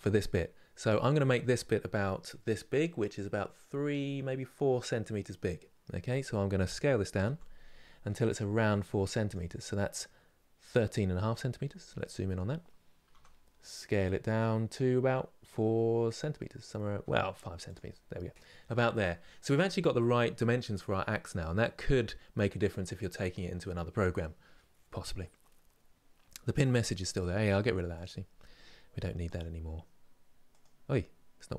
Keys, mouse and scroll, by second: 11.3-11.9 scroll up 10, 12.8 s.